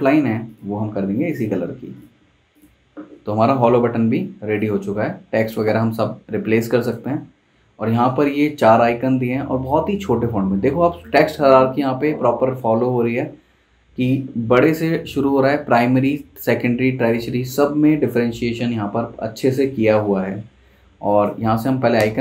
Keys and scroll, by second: 19.6 super+Tab, 21.6 super+c, 22.0 super+Tab.